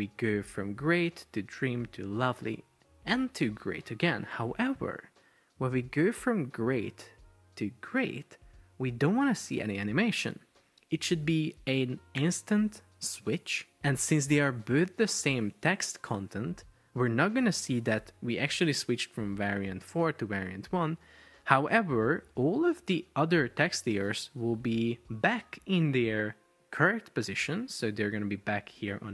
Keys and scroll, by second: 28.9 shift+super+4.